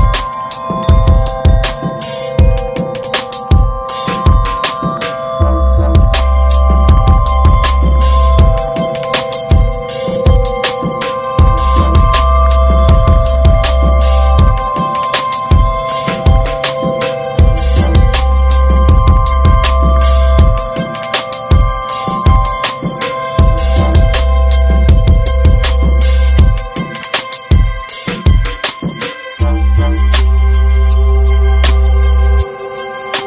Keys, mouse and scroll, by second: 0.2 ctrl+z, 0.5 click, 1.7-3.6 drag, 3.6 alt+z, 4.3 2, 5.1 ctrl+b, 10.3 Tab, 10.4 drag, 10.6-11.3 scroll down 4, 10.7 middle click, 11.3-11.6 shift+middle drag, 11.6 click, 11.9-13.2 middle drag, 13.2 scroll up 2, 13.4-16.1 middle drag, 16.4 scroll down 1, 16.6-17.4 middle drag, 17.8-18.3 shift+middle drag, 18.3 click, 18.4 Tab, 18.8 alt+z, 19.0 scroll up 1, 19.3 shift+middle click, 19.9 ctrl+s, 20.2 middle click, 21.0 F4, 26.9 alt+middle click, 27.2 alt+middle click, 27.6 scroll up 1, 27.9 shift+middle click, 30.7 right click, 31.3-32.8 shift+middle drag, 32.8 r.